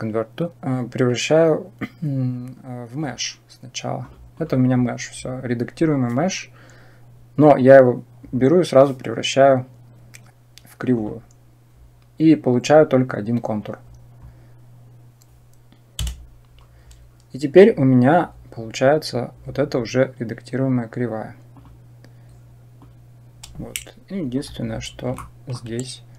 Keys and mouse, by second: 8.1-10.9 right drag, 15.8 Tab, 22.6-24.1 drag, 25.0 shift+middle click.